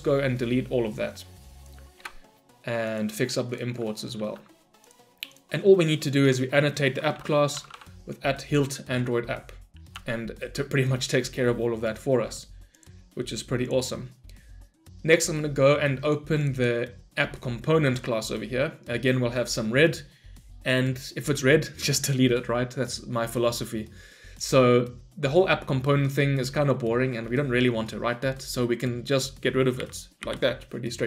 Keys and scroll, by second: 4.0 ctrl+y, 8.6 Return, 29.8 Delete.